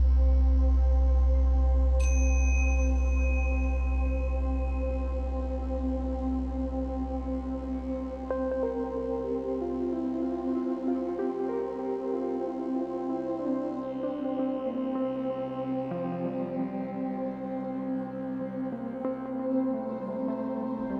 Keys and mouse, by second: 2.2 space, 2.8 space, 3.7 click, 5.0 g, 5.7 click, 6.1-7.7 typing, 6.2 click, 8.7 ctrl+alt+click, 9.1-13.6 typing, 9.3-11.7 alt+shift+drag, 13.3-14.5 alt+shift+drag, 14.7 click, 15.1 click, 15.5 click, 16.1-19.7 alt+shift+drag, 19.7 Left, 19.9 Left, 20.0 Left, 20.2 Left.